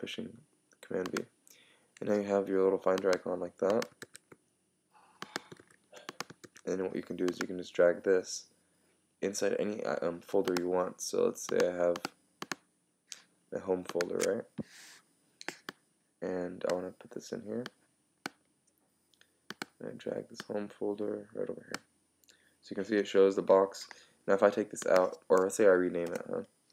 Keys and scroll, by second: 4.0 super+w, 26.1 Return.